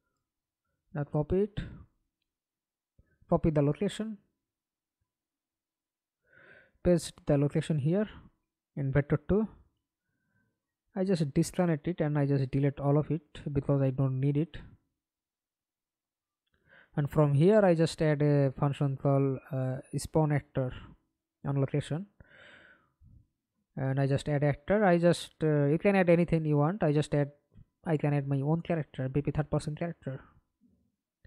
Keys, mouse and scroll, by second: 3.8 right click, 6.5 right click, 9.6 alt+click, 11.1 right click, 11.7 scroll down 1, 14.0 Delete, 16.6-19.3 typing, 22.2 Return, 27.2-28.1 typing.